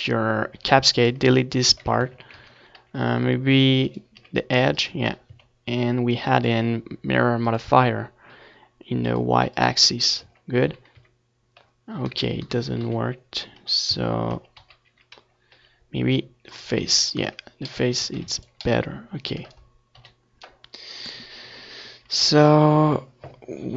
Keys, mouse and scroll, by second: 0.9 ctrl+z, 1.3 ctrl+z, 1.7 ctrl+z, 2.9 Tab, 3.5 Tab, 3.8 z, 4.8 x, 6.2 z, 6.7 Tab, 7.8 ctrl+s, 9.7 KP_1, 15.3 z, 15.7-18.8 middle drag, 16.1 Tab, 20.0-21.3 drag, 20.2-21.3 middle drag, 20.8 right click, 21.3 KP_7, 22.0 a, 23.3 c.